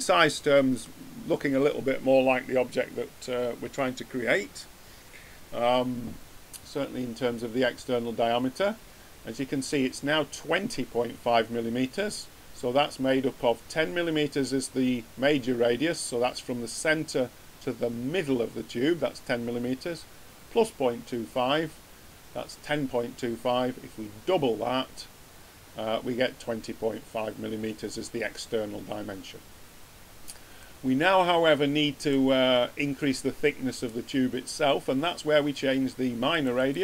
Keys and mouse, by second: 3.8 middle click, 30.8-31.2 middle drag, 31.2 click.